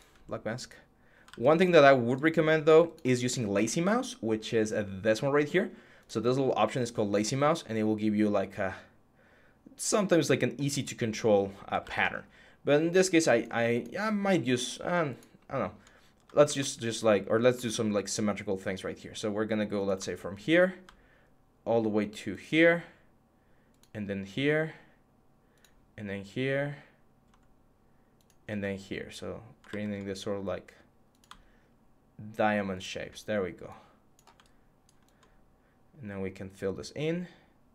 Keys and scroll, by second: 1.1 ctrl+z, 11.6 ctrl+z, 16.3 Tab, 17.4 Tab, 29.5 ctrl+z.